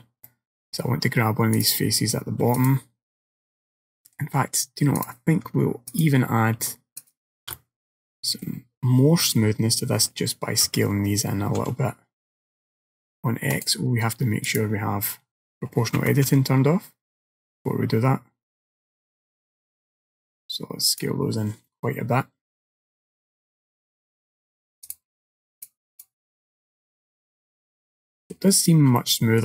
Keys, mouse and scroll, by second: 0.3 middle click, 1.6 click, 2.6 click, 4.0 middle click, 5.0 click, 6.0 alt+click, 7.1 alt+shift+click, 7.6 middle click, 10.7 s, 14.5 click, 16.0 s, 21.7 middle click, 24.0-24.8 scroll down 2, 24.9 click, 25.6 click, 26.7 middle click, 29.0 shift+middle click.